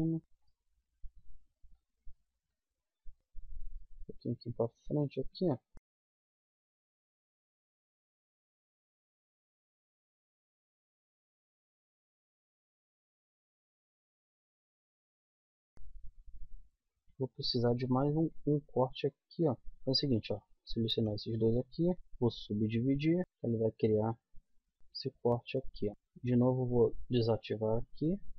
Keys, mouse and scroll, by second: 1.4 middle click, 2.4 middle click, 3.0-4.5 drag, 4.6 middle click, 4.8 right click, 5.1 middle click, 5.9 middle click, 6.2 click, 6.2 right click, 6.6 middle click, 7.0 middle click, 8.1 click, 8.3-9.6 middle drag, 9.8-11.0 middle drag, 11.6 click, 11.8 right click, 12.2 middle click, 12.4 right click, 12.8 g, 13.1 middle click, 15.5 middle click, 16.8 right click, 17.8 middle click, 18.6 g, 19.6-21.9 middle drag, 21.9 w, 24.6 middle click, 24.8 z, 25.8 z, 27.1-28.3 middle drag.